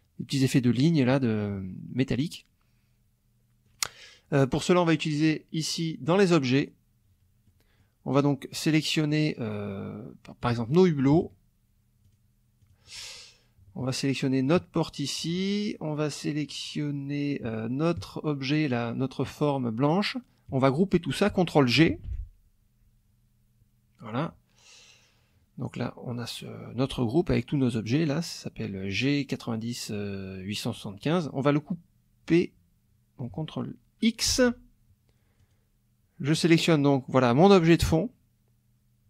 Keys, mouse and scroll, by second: 3.7 click, 5.2 click, 6.0 click, 7.5 middle click, 8.7 click, 10.4 click, 11.1 shift+click, 12.0 shift+click, 12.6 shift+click, 14.4 shift+click, 18.7 shift+click, 21.9 ctrl+g, 34.3 ctrl+x, 35.4 click.